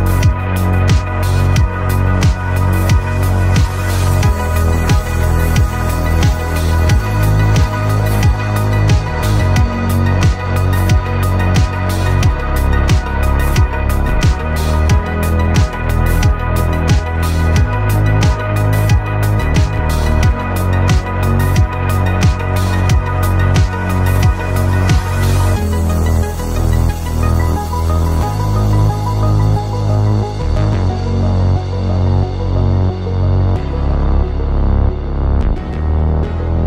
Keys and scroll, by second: 28.0-29.0 typing.